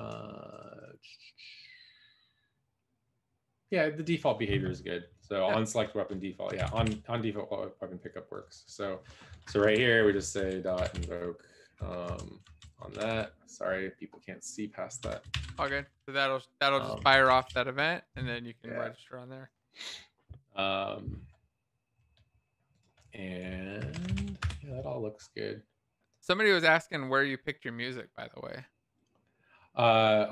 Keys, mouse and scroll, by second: 10.3-11.4 typing, 12.0 Return, 12.0 Right, 12.4 Left, 13.2 shift+-, 15.0-16.1 typing, 16.9 alt+shift+f, 17.4 ctrl+s, 17.4 Down, 23.7 shift+Delete, 24.1 ctrl+s, 24.1 Down, 24.3 Escape.